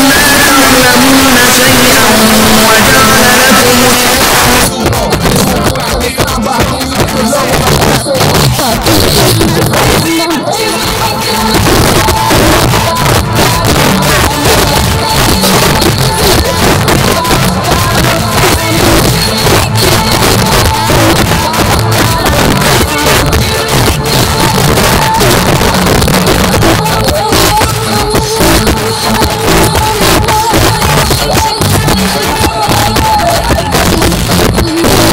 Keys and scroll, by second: 3.9 Page_Down.